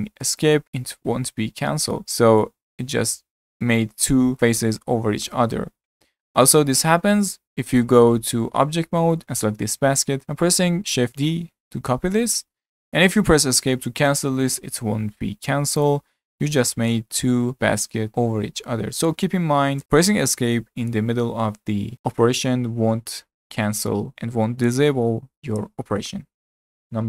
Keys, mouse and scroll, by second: 2.0 click, 2.5 g, 5.8 ctrl+z, 6.2 ctrl+z, 6.5 ctrl+z, 6.9-7.2 scroll down 5, 7.4 Tab, 8.3-9.0 scroll down 3, 9.0-10.8 shift+middle drag, 11.4 shift+d, 15.8 click, 17.5 g, 19.8 Delete.